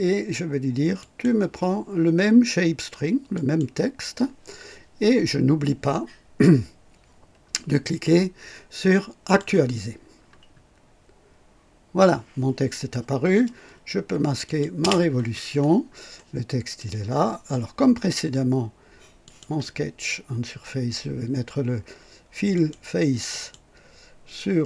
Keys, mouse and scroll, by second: 0.9 click, 3.3 click, 9.2 click, 14.4 click, 14.7 space, 15.5-15.8 scroll up 2, 16.1-16.9 right drag, 19.2 click, 22.5 click, 23.2 click.